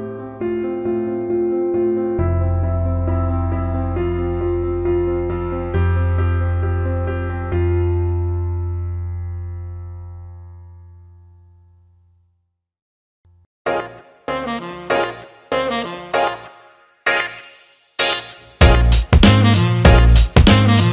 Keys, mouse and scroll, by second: 0.2-3.1 drag, 4.2 click, 4.5 Tab, 6.2 alt+shift+middle click, 7.6-9.1 shift+drag, 9.2 alt+middle click, 9.5 alt+shift+middle click, 10.9 shift+click, 14.1 ctrl+b, 16.9 click, 18.1 Tab, 19.2 alt+h, 20.0 click, 20.7-20.9 alt+middle drag.